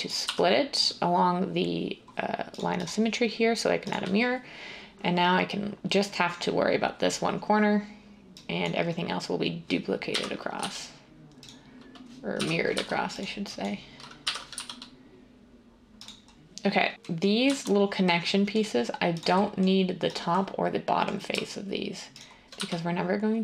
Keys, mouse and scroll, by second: 0.2 x, 10.0-10.6 typing, 12.3 g, 14.2-15.0 typing, 17.0 z, 18.5 z, 22.6 x.